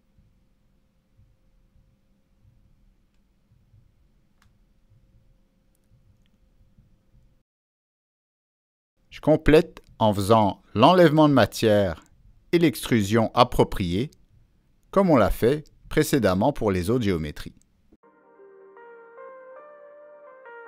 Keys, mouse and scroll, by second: 0.9 click, 2.1 click, 2.8-3.1 scroll up 1, 4.5 click, 5.6 click, 6.7 click, 7.6 click, 7.7 middle click, 11.5 click, 12.2 click, 15.0 click, 15.6-16.4 scroll down 2, 16.9-17.2 scroll down 1, 17.7 click, 18.6 click, 19.1 click, 19.4 scroll down 1, 20.4 click, 20.4 scroll up 1.